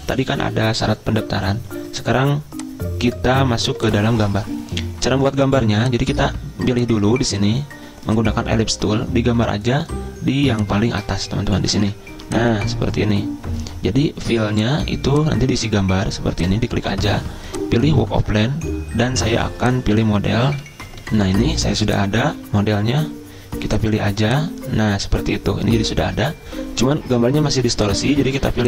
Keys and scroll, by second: 21.2 F10.